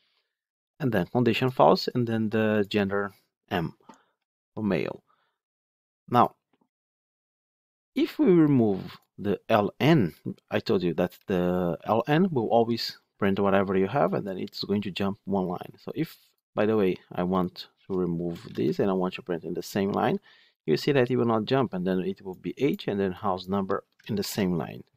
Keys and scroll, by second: 24.1 ctrl+shift+F10.